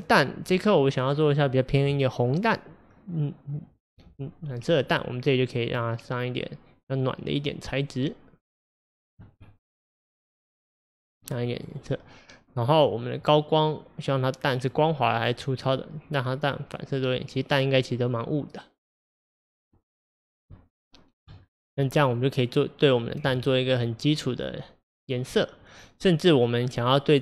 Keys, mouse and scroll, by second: 4.5 click, 9.6-12.6 middle drag, 13.3-18.7 drag, 20.0 scroll up 2, 20.6-21.3 shift+middle drag, 21.3 scroll up 1, 21.5-21.9 scroll down 2, 21.9-26.5 middle drag.